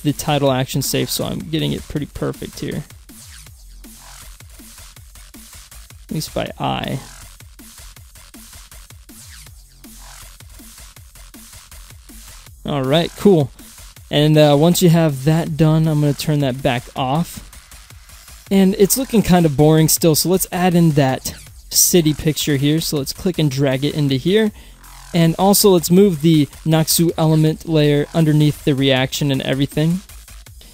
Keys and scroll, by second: 1.2 Right, 2.2 Left, 3.6 Down, 4.8 Right, 7.2 Down, 8.1 Up.